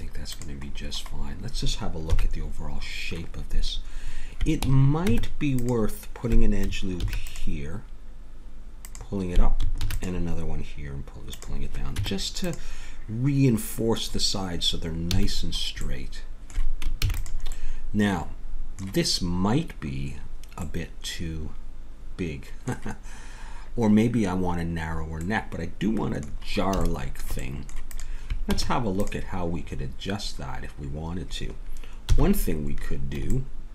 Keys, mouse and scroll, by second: 2.1 KP_1, 5.0 Tab, 7.0 ctrl+r, 9.8 ctrl+r, 12.0 Tab, 15.1 a, 15.4-18.0 middle drag, 17.0 ctrl+s, 20.9 middle click, 22.1 middle click, 27.9 click, 28.5 Tab, 32.1 KP_1.